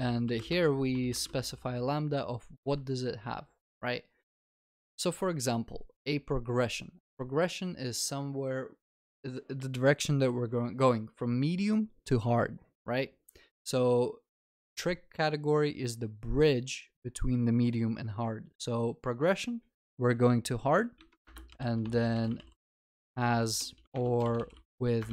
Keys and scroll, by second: 20.1 Return, 23.9 ctrl+BackSpace.